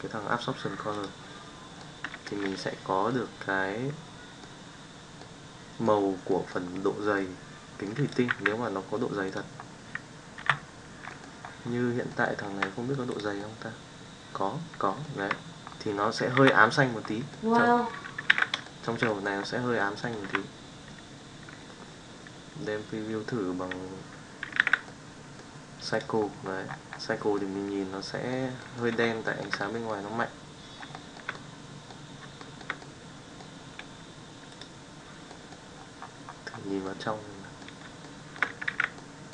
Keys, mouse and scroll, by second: 1.7-2.3 middle drag, 3.0-4.4 middle drag, 5.2-5.8 middle drag, 6.2 middle click, 7.1-7.8 middle drag, 8.0 click, 8.3 g, 10.4 KP_Divide, 11.1 middle drag, 12.0 middle click, 12.5 Tab, 13.1 click, 13.3-15.1 middle drag, 15.2 Tab, 16.4 KP_Divide, 17.3-17.6 middle drag, 18.3 alt+a, 18.6 shift+middle drag, 19.0 middle click, 19.7-20.1 middle drag, 20.3 z, 24.5 alt+a, 24.8-25.4 middle drag, 27.4-28.3 middle drag, 29.2 shift+middle click, 29.6-29.9 middle drag, 30.9 shift+middle drag, 31.3-31.8 middle drag, 32.4 shift+middle drag, 32.8-33.4 middle drag, 35.2 middle drag, 36.8-37.6 middle drag, 38.1 shift+middle click, 38.7 alt+a, 38.9-39.3 middle drag.